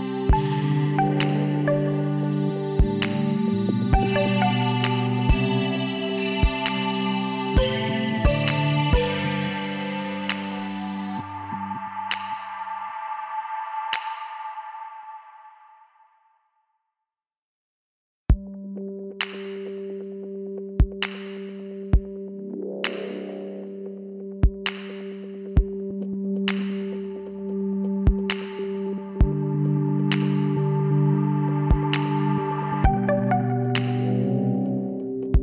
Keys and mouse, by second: 1.0 middle click, 1.3-2.6 middle drag, 2.6-4.1 drag, 3.0 w, 8.7-10.5 middle drag, 10.5-13.4 drag, 10.9 z, 12.1 z, 13.6 z, 14.1-15.9 drag, 14.7 x, 17.4-19.4 drag, 18.0 z, 19.1 z, 21.3-22.7 drag, 21.6 z, 22.7 KP_Divide, 24.7 KP_Decimal, 27.4 KP_1, 28.1 z, 28.8 b, 31.8 z.